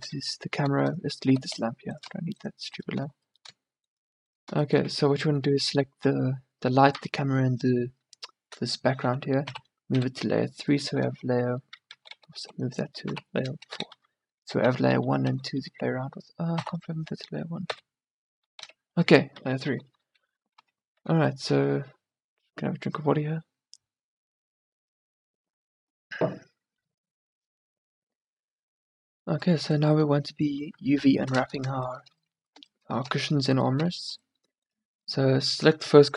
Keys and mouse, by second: 0.2 middle click, 1.4 x, 3.3 middle click, 5.0 z, 7.1 z, 9.6 m, 11.1-13.1 typing, 14.8 1, 15.3 2, 15.6 1, 16.6 m, 18.6-21.1 typing, 28.5-30.8 middle drag, 30.8 KP_1, 31.3 middle click, 33.9 a.